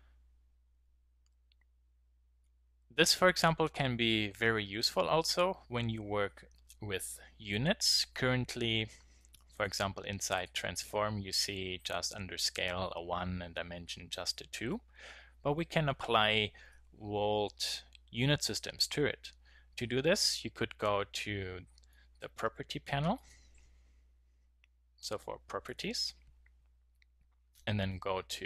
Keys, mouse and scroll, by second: 11.9 click, 23.1-24.9 drag.